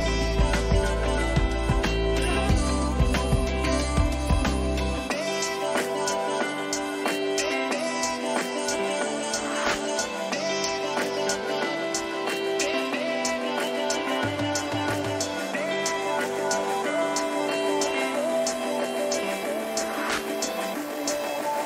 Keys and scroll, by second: 9.7 ctrl+-, 10.6 ctrl++, 15.8 Return.